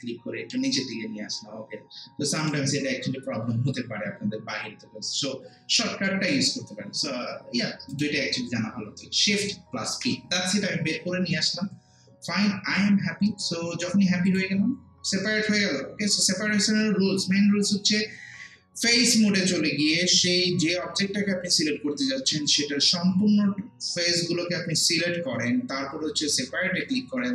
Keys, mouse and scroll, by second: 2.4 click, 9.3 click, 9.9 shift+p, 14.3 click.